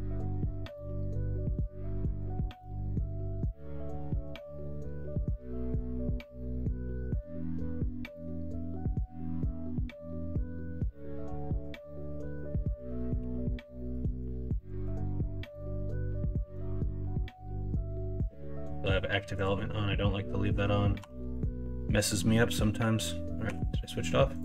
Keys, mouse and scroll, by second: 12.2 middle click, 13.1 3, 15.4 middle click, 15.9 s, 18.1 ctrl+z, 18.6 ., 20.0 middle click, 20.9 KP_1, 21.1 KP_3.